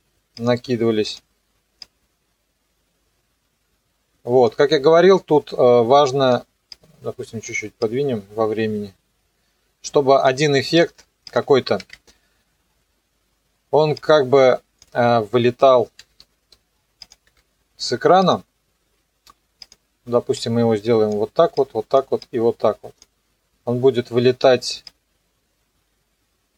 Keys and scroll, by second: 11.8 ctrl+d, 16.0 m, 17.3 Delete.